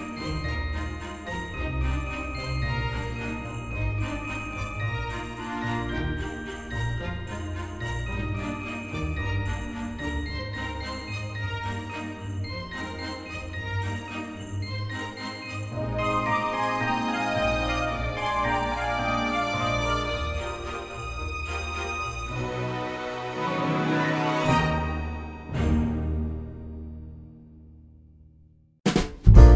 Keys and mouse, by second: 0.7 shift+right click, 1.6 shift+a, 3.4 click, 3.9 s, 5.3 click, 5.5 g, 5.5 z, 7.0 click, 7.4 shift+middle click, 7.8 right click, 8.6 click, 8.8 Tab, 9.9 shift+d, 10.5 z, 11.2 click, 11.5 s, 12.8 click, 13.1 g, 13.3 z, 13.7 click, 14.0 Tab, 15.0 shift+middle click, 16.3 KP_1, 17.1 shift+middle click, 17.8 Tab, 18.8 shift+d, 19.2 s, 20.1 click, 20.7 middle click, 21.1 g, 21.6 y, 22.3 click, 22.7 KP_1, 23.4 s, 25.1 click, 25.3 g, 26.2 click, 26.8 shift+d, 27.2 x, 28.7 click, 29.2 shift+middle click.